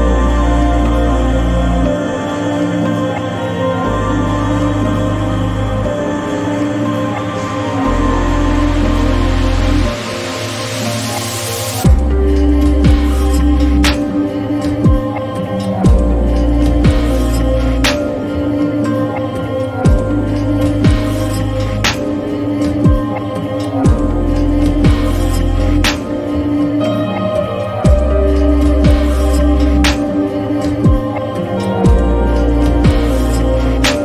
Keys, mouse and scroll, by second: 0.8-10.8 drag, 13.3 click, 16.9 click, 20.2-23.6 drag, 21.0 typing, 24.9 click, 24.9 typing, 32.0 click.